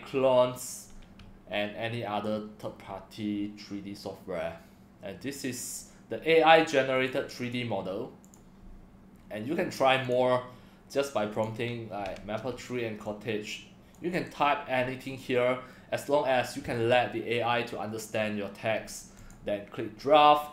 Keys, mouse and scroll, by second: 1.2-2.2 drag, 2.6-5.6 drag, 7.0 click, 7.4 click, 8.2 click, 10.0 click, 11.3 click, 13.0 click, 14.1 ctrl+c, 15.1 click, 15.7 click, 16.8 ctrl+v, 19.1 click.